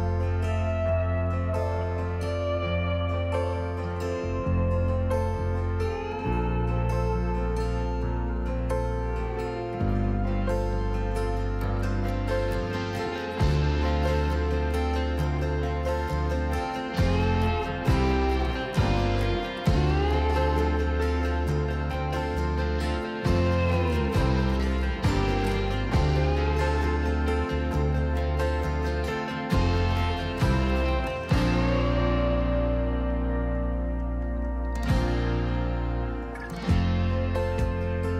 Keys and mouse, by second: 0.7 2, 1.0 F12, 29.7 click, 30.7 shift+middle click, 31.3-32.6 shift+drag, 33.4-35.7 shift+middle drag.